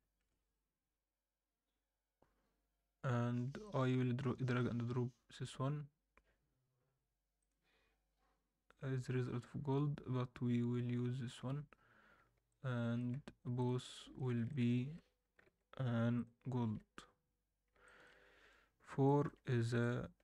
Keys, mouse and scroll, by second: 12.4-13.0 alt+middle drag, 13.6 drag, 13.9 alt+middle drag, 14.4 shift+click, 15.4 ctrl+l, 16.7 alt+a, 16.9 scroll down 1, 17.8 alt+shift+middle drag, 18.6-18.9 scroll down 1, 19.0 alt+middle drag, 19.8 middle click.